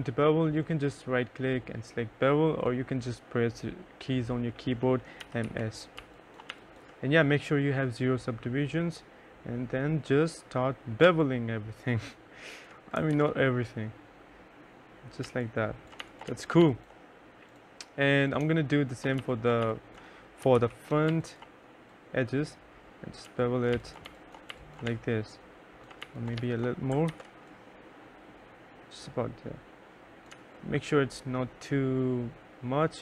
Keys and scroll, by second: 4.3-5.9 typing, 10.4 3, 12.5 ctrl+z, 14.6-16.5 typing, 18.6-20.5 typing, 22.4-25.8 typing, 26.5 ctrl+z, 29.7 3, 32.4-33.0 typing.